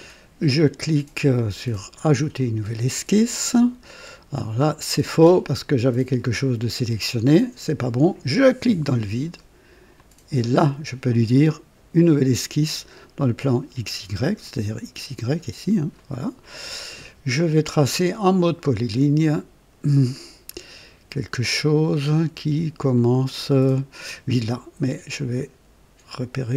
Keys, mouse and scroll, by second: 1.9 click, 4.9 click, 8.3 click, 9.9 click, 15.9 click, 18.3 click, 20.1-20.4 scroll up 1, 25.1 click.